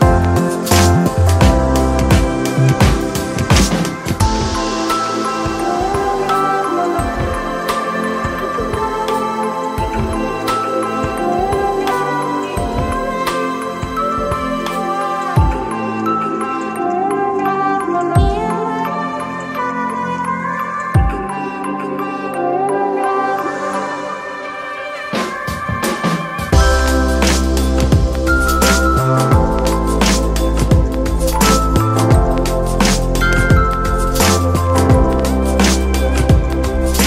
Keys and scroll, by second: 20.8 super+z, 32.5 super+z.